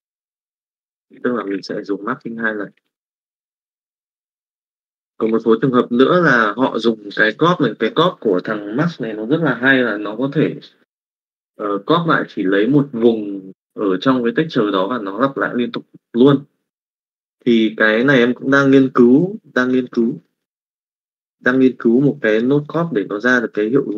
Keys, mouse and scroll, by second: 0.5 click, 3.1 click.